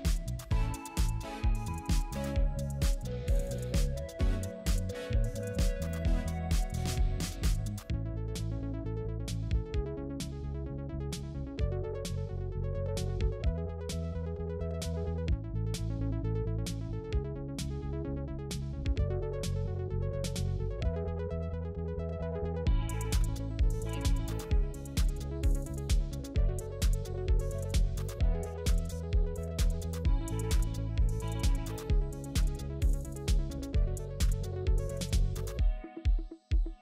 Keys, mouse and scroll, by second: 4.3 typing, 9.4-9.8 scroll down 1, 9.8-10.4 scroll up 1, 10.4 typing, 11.8 scroll down 1, 12.1 typing, 13.0-13.4 scroll down 1, 13.4 scroll up 1, 14.6 alt+click, 18.0 alt+click, 19.2-20.0 scroll down 1, 21.2 scroll down 1, 22.2 scroll up 1, 23.9 double click, 28.9 Delete, 33.8 right click.